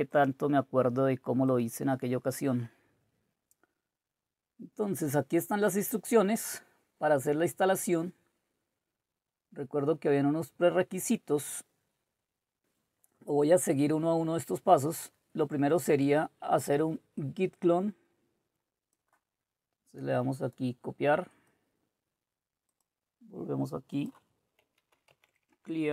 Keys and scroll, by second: 25.5 Return, 25.5-25.9 typing.